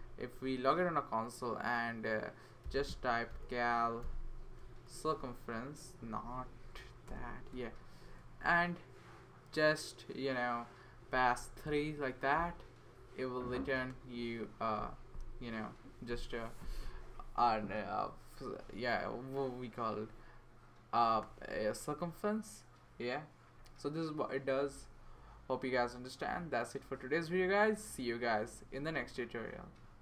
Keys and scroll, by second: 2.4-4.5 typing, 4.9 Up, 6.3 Up, 6.7 Up, 7.1 Return, 8.2-8.9 typing, 11.4 typing.